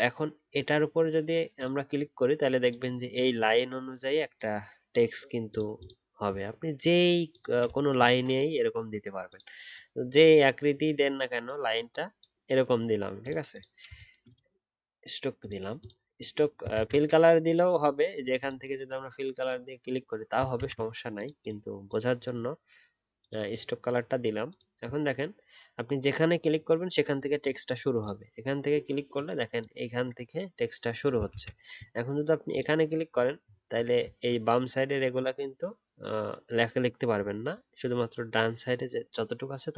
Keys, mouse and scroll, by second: 16.7 ctrl+z, 20.5 ctrl+z, 31.3 ctrl+z, 33.4 alt+scroll up 1, 34.0 alt+scroll down 1, 37.3-39.7 alt+scroll up 1.